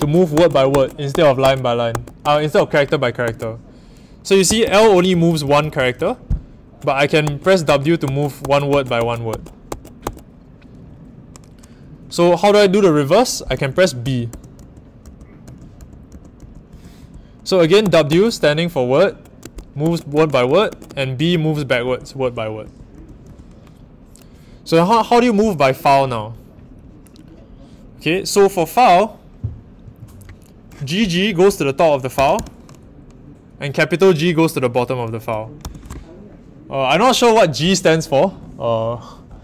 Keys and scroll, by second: 0.0-3.2 typing, 4.4-5.9 typing, 7.2-10.0 typing, 13.5-18.3 typing, 19.4-23.2 typing, 32.1 typing, 35.6 shift+g.